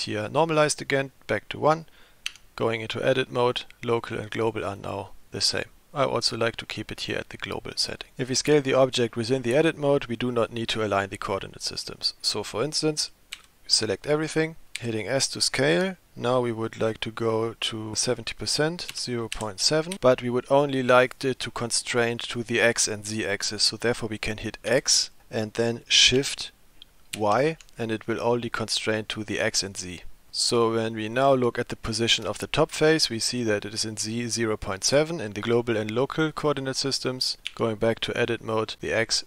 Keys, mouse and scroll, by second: 2.3 Tab, 4.0 click, 4.4 click, 4.8 click, 5.4 click, 6.9 click, 13.4 a, 14.8 s, 32.3 click, 35.4 click, 36.2 click, 37.5 Tab.